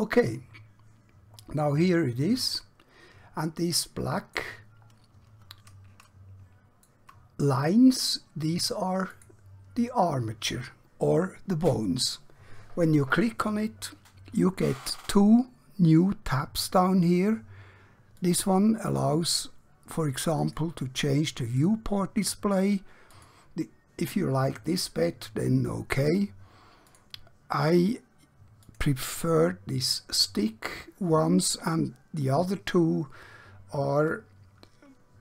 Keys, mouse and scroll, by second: 5.0 scroll up 1, 6.1-6.9 middle click, 9.0 click, 18.2 click, 26.8 click.